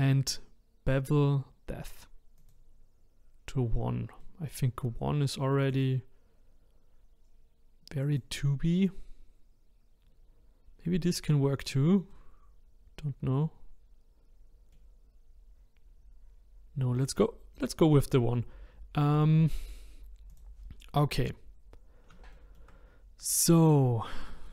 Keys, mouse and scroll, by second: 2.4 click, 4.2-5.6 middle drag, 5.6 click, 8.0 click, 12.1-15.2 middle drag, 17.5-19.2 drag, 20.3 click, 21.7 scroll down 2, 22.3-24.5 shift+middle drag.